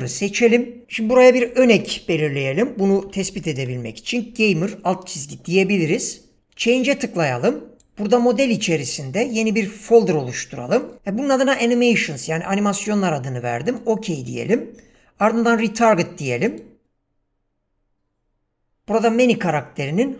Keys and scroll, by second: 1.5 Caps_Lock, 1.6-4.3 typing.